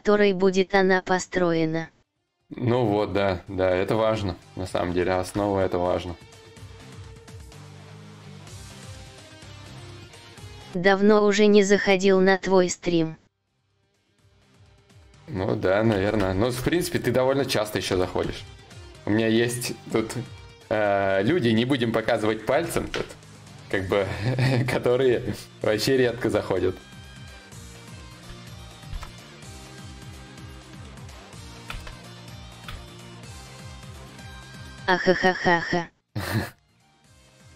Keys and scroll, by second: 15.6 ctrl+z, 28.4 ctrl+z, 28.4 y.